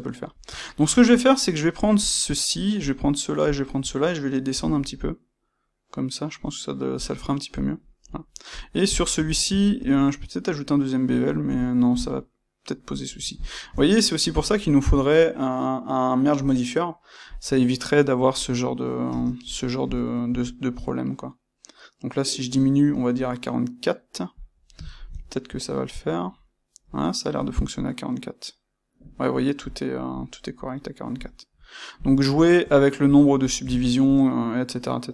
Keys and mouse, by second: 1.9 click, 2.7 shift+click, 3.4 shift+click, 7.0 click, 7.7-8.4 middle drag, 8.4 click, 8.9-17.2 ctrl+shift+middle drag, 17.2 click, 19.0 space, 24.8-35.1 ctrl+middle drag.